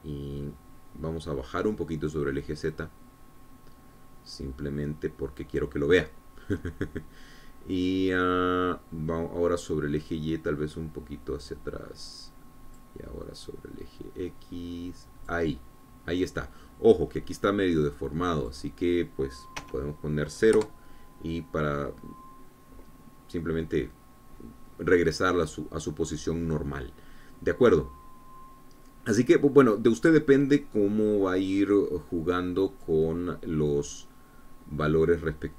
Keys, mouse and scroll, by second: 4.3-7.3 drag, 11.2-14.5 drag, 15.0-17.1 drag, 19.4 click, 21.2 KP_0, 22.1 KP_Enter, 32.6-34.6 drag, 35.3-35.5 drag.